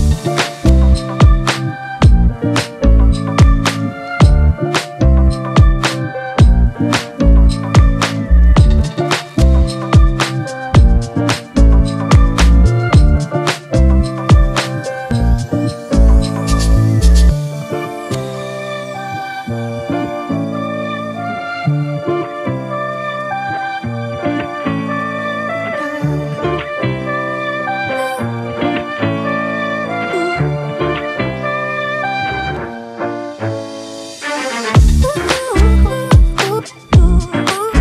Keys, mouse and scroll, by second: 2.0-3.9 scroll down 1, 11.2 ctrl+t, 12.2 alt+shift+click, 14.5 Return, 18.1 ctrl+t, 19.1 alt+shift+click, 21.0 alt+shift+click, 24.3 Return, 25.2 typing, 30.7-33.7 scroll up 1.